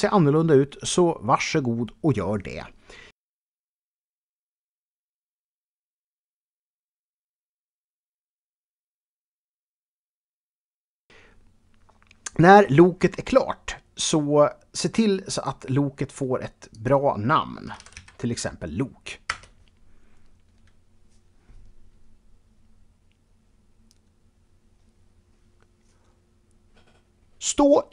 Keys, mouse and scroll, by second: 0.0-0.1 typing, 0.5 Return, 2.0 KP_1, 3.8 e, 9.5 ctrl+Return, 12.2 middle click, 13.3 click, 14.6 i, 16.2 click, 17.2 click, 17.7 typing, 19.2 Return.